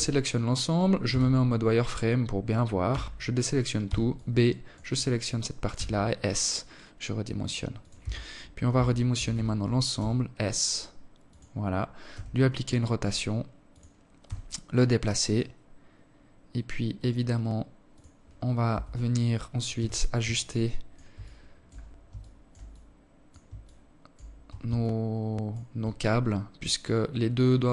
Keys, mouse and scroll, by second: 1.3 a, 2.2 b, 4.1 s, 6.4 Tab, 7.2 Tab, 7.5 a, 7.7 a, 8.4 s, 10.6 r, 12.7 g, 17.0 Tab, 18.1 z, 18.7 alt+click, 19.6 alt+shift+click, 21.0 alt+click, 22.0 alt+shift+click, 23.2 alt+click, 26.7 KP_0, 27.6-27.7 scroll down 4.